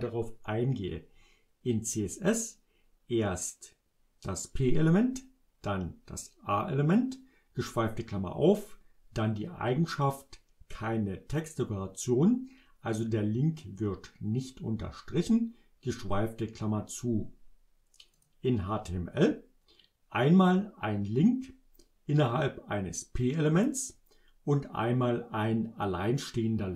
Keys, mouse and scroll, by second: 18.2 click.